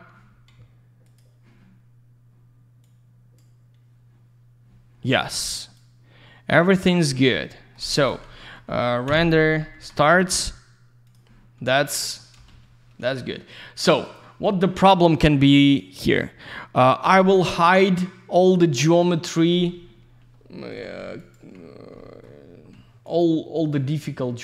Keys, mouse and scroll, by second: 1.0 ctrl+shift+click, 1.2 ctrl+shift+click, 2.8 ctrl+shift+click, 5.6 ctrl+shift+click, 7.4 ctrl+alt+shift+middle click, 7.8 ctrl+shift+q, 7.9 ctrl+shift+click, 8.3 ctrl+alt+shift+z, 8.3 ctrl+alt+shift+middle click, 9.1 ctrl+shift+Delete, 9.7 ctrl+shift+z, 11.1 ctrl+shift+click, 12.0 ctrl+shift+middle click, 12.5 ctrl+shift+f, 13.2 ctrl+q, 14.0 ctrl+click, 15.8 ctrl+click, 17.1 ctrl+q, 17.4 ctrl+click, 17.6 ctrl+click, 18.7 ctrl+click, 18.9 ctrl+click, 20.3-20.7 scroll up 1, 21.2 ctrl+click, 21.3 ctrl+click, 21.5 scroll down 1, 22.0 middle click, 22.5 scroll up 1, 23.1 ctrl+click, 23.6 ctrl+click.